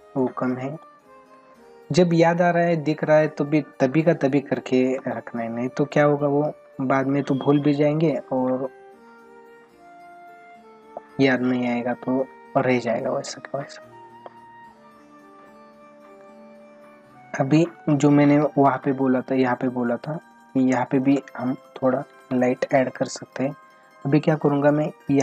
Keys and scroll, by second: 17.2 ctrl+-, 17.8 space, 19.1 ctrl+-, 20.6 ], 22.2 ctrl+alt+z.